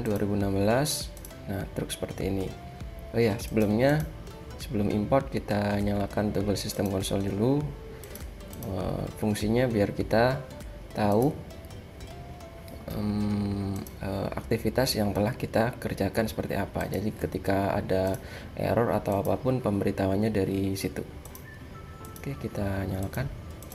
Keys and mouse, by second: 4.0-7.0 drag, 11.3-13.0 drag, 13.8-15.5 drag, 19.4-19.9 drag.